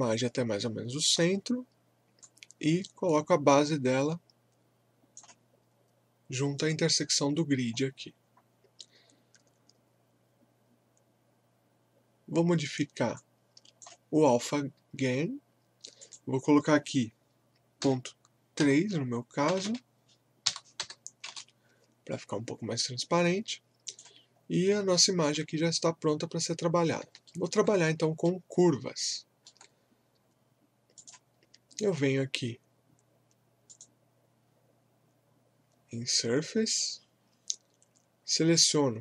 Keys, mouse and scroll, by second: 7.4 scroll up 1, 8.2 scroll down 1, 13.1-16.0 drag, 18.3-19.5 typing, 20.5-21.3 typing, 23.8 click, 24.3 scroll up 1, 24.9 alt+middle click, 25.5 scroll up 1, 27.3 alt+middle click, 27.8 scroll up 1, 28.2-31.0 alt+middle drag, 31.0 click, 33.7 click.